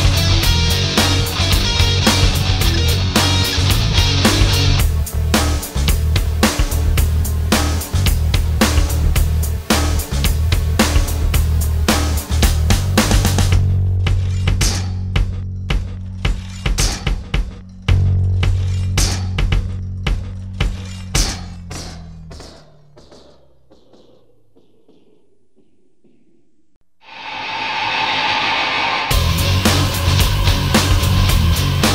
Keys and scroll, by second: 30.4 alt+space.